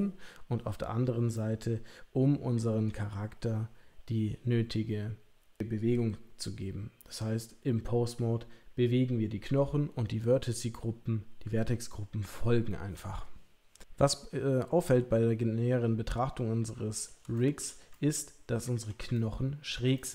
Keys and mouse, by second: 1.4-2.8 middle drag, 13.8-17.0 middle drag, 17.3-17.6 shift+middle drag, 17.9-18.8 ctrl+middle drag, 19.1-19.6 shift+middle drag, 19.9-20.1 middle drag.